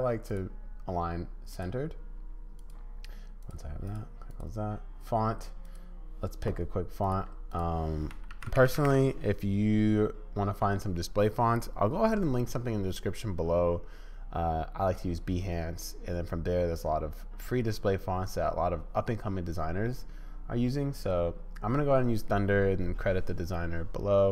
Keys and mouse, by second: 0.3-1.6 drag, 1.6-2.6 middle drag, 2.6 click, 2.7 middle click, 3.4 click, 3.5 middle click, 3.9 click, 4.0 middle click, 4.3 click, 5.6 click.